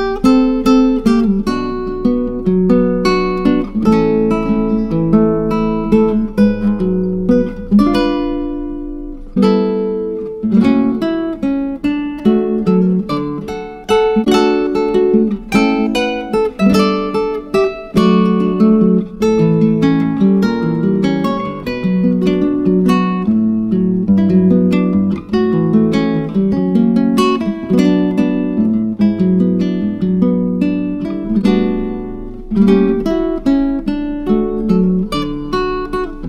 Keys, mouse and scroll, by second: 0.7-4.2 drag, 11.9 click, 13.1 click, 16.3-16.8 scroll down 2, 17.3-18.7 drag, 20.8 click, 23.0 click, 27.5-30.6 drag, 32.4 click.